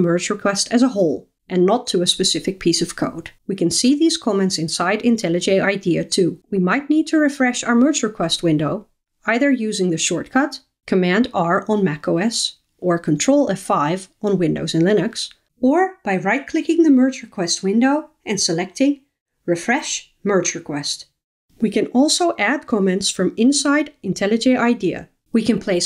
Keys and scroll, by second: 7.9 super+r, 19.1 super+r.